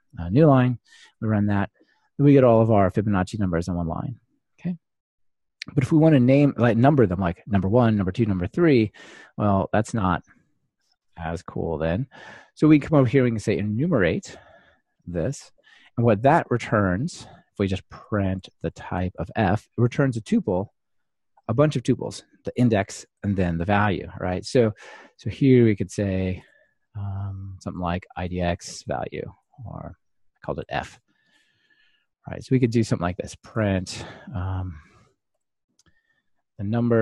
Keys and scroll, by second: 1.3 ctrl+r, 14.5 Return, 16.0 ctrl+alt+shift+Left, 19.8 ctrl+r, 26.5 super+x, 31.3 Escape.